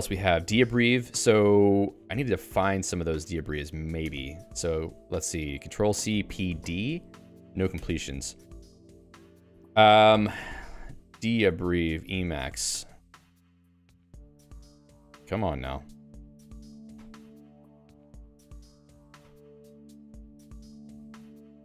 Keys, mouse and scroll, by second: 0.0-1.2 typing, 2.2 Escape, 3.6-4.7 typing, 7.4 ctrl+g, 7.7 Escape.